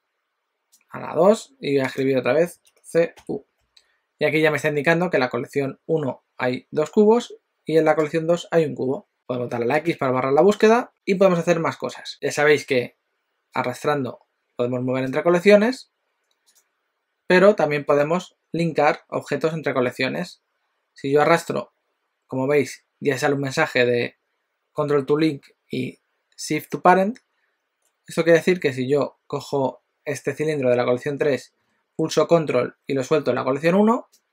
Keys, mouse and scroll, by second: 9.1 click, 13.5 click, 16.4 click, 17.9 click, 21.3 click.